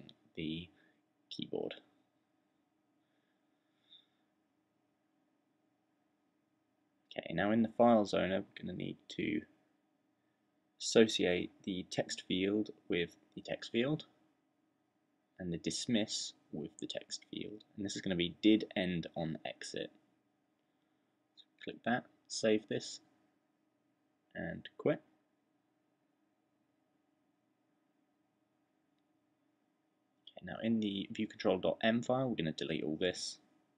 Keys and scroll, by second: 0.0-2.0 typing, 27.1 super+s, 27.8 super+q.